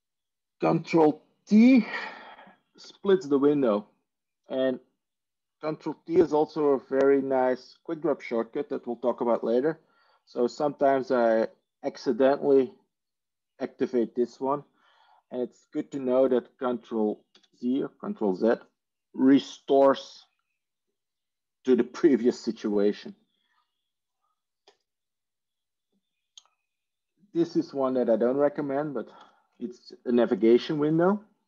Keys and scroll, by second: 2.7 ctrl+t, 17.2 ctrl+z, 29.1 ctrl+shift+n.